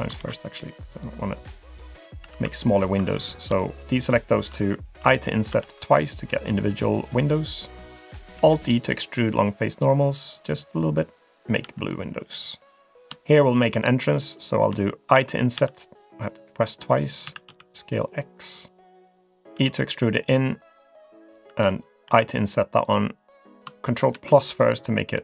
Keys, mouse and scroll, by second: 0.2 ctrl+r, 2.2 3, 2.6 alt+click, 3.8 shift+click, 4.2 shift+click, 5.0 i, 8.4 alt+e, 11.6 g, 12.9 click, 13.3 shift+click, 13.6 shift+click, 14.3 shift+click, 15.1 i, 17.2 s, 19.5 e, 22.1 i, 24.0 ctrl+KP_Add, 25.1 g.